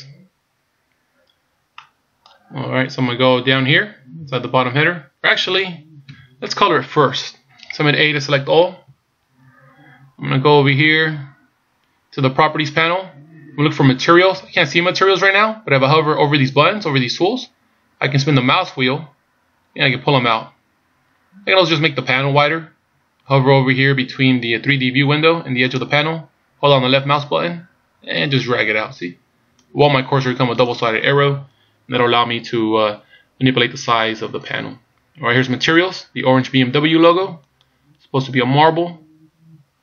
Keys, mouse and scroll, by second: 0.0-1.2 scroll down 2, 1.8 middle click, 6.1 KP_1, 8.8 a, 18.7-20.5 scroll down 8, 20.6-21.1 scroll up 5, 21.1-21.5 scroll down 2, 21.5-23.5 scroll up 2, 25.8 click, 37.6 click.